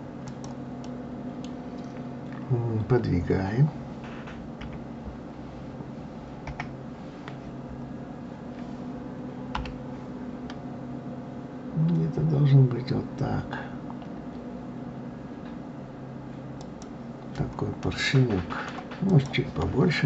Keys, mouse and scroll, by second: 0.8-3.8 middle drag, 4.6 KP_3, 7.2-9.5 scroll up 3, 9.5 g, 17.8-19.1 middle drag, 19.1 click.